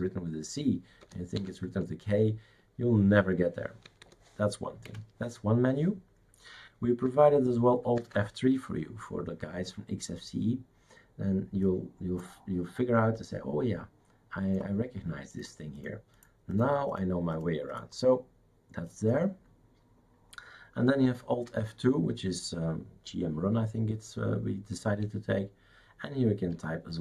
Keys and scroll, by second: 1.0 BackSpace, 1.3 k, 3.8 BackSpace, 4.0 BackSpace, 4.9 Escape, 8.0 alt+F3, 21.5 alt+F2.